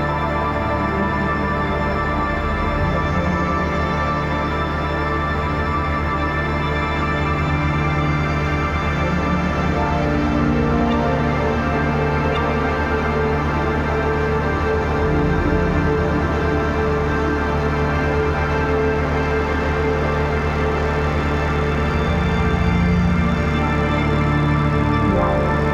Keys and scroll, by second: 0.0 [, 11.5 r, 15.3 ctrl+s, 22.4-25.7 typing.